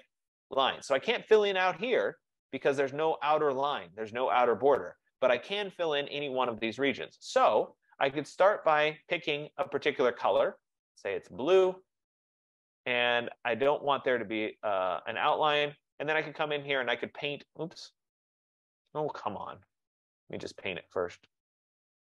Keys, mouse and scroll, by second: 8.8 click, 10.8 click, 11.8 click, 13.7 click, 14.5 click, 16.6 click, 18.3 click, 19.9 click, 20.9 click.